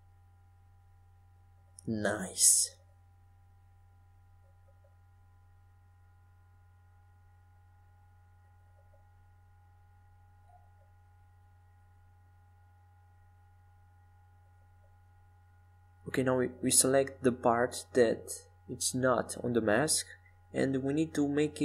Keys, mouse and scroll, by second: 2.9 e, 6.0 s, 11.6-13.8 drag, 15.5-17.6 middle drag, 17.7 Tab, 19.2 z, 19.8-21.6 middle drag.